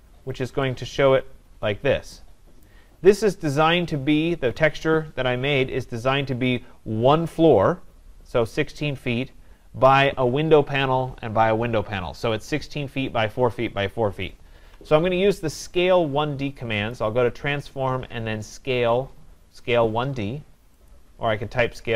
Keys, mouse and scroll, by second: 0.0 scroll, 2.7 right click, 3.3-4.4 scroll, 16.9 click, 20.9 click.